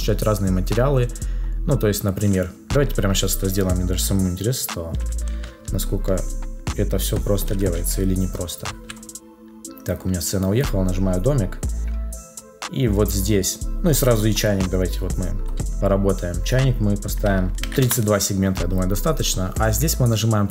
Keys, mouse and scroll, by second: 17.8 Return.